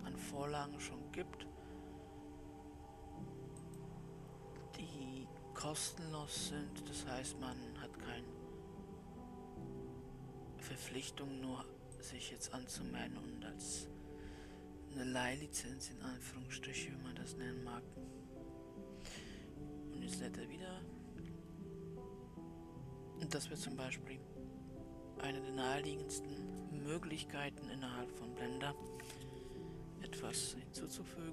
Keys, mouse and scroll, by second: 18.1-21.4 scroll down 2.